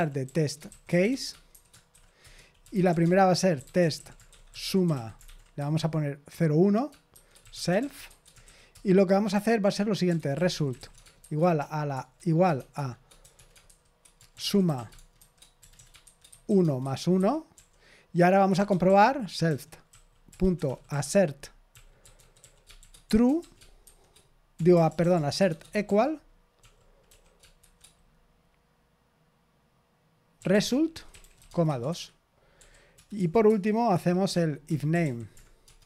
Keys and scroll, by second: 0.0-27.5 typing, 30.1-35.8 typing, 33.4 Return, 33.9 Return.